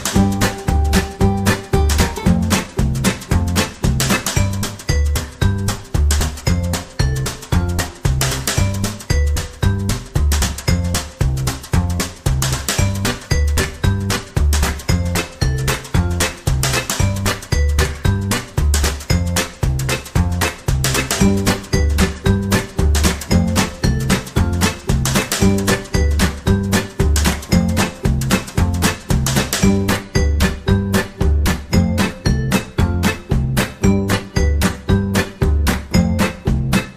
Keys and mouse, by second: 1.6 middle click, 2.6 r, 3.2 Tab, 3.6-4.3 middle drag, 5.6 KP_3, 6.4 Tab, 7.7 shift+right click, 8.5 ctrl+l, 9.6 s, 11.4 alt+s, 14.6 Tab, 15.0-15.5 middle drag, 15.8-16.2 right drag, 16.2-19.5 middle drag, 19.8 KP_3, 20.6 right click, 21.2 Tab, 21.4 right click, 21.7 g, 22.3 right click, 22.7 g, 26.9 KP_1, 27.9 right click, 28.2 g, 29.4 Tab, 29.7-30.3 middle drag, 30.8 middle click, 31.5-31.9 middle drag, 32.1 KP_3, 32.7 Tab, 32.9 right click, 33.1 g, 34.2 right click, 34.5 g, 36.6 Tab.